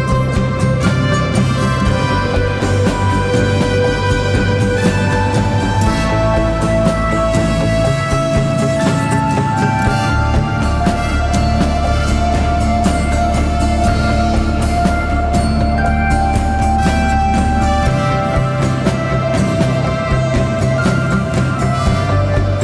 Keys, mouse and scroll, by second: 18.2 double click.